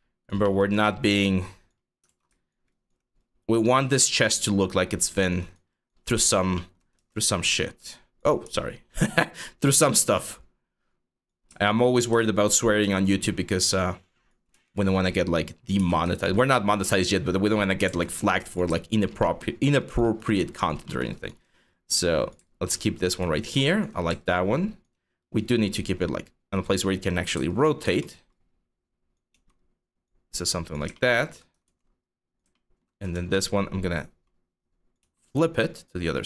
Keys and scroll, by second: 1.7 ctrl+z, 6.6 e, 8.1-9.3 typing, 14.1-15.9 typing, 17.5 ctrl+z, 28.9 w, 31.3 ctrl+d, 32.8 r, 34.6 w.